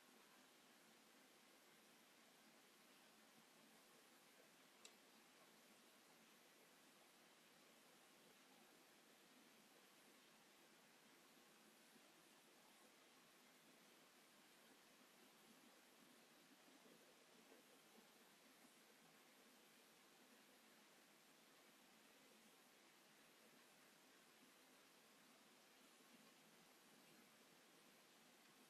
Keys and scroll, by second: 0.7 m, 1.4 space, 9.6 p, 13.8 space, 16.4 ctrl+g, 19.3 space, 22.8 space, 26.0 Escape, 28.2 Escape.